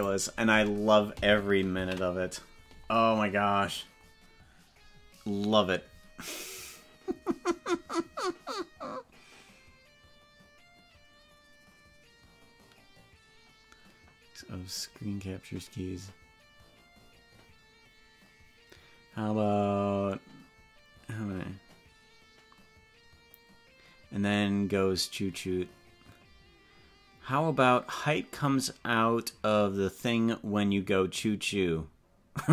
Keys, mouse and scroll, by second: 0.0 click, 2.2 ctrl+s.